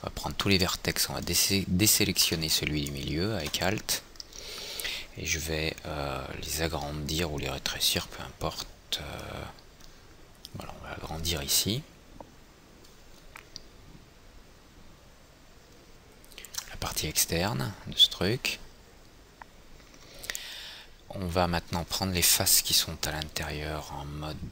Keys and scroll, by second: 8.5 r, 22.7 i.